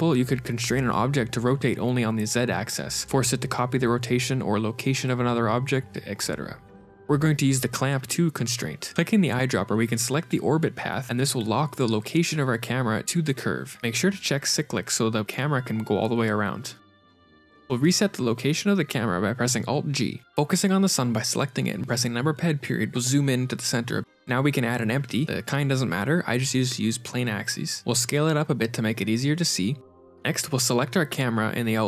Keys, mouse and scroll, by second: 6.6 click, 7.7-9.3 scroll down 10, 9.3 click, 13.6 click, 13.9 click, 14.9 ctrl+space, 14.9 shift+middle click, 15.7 g, 18.6 shift+space, 19.7 shift+space, 20.3 ctrl+space, 21.8 click, 22.4 KP_Decimal, 23.7 shift+a, 24.1 shift+a, 26.2 scroll down 4, 26.7 s, 30.4 click.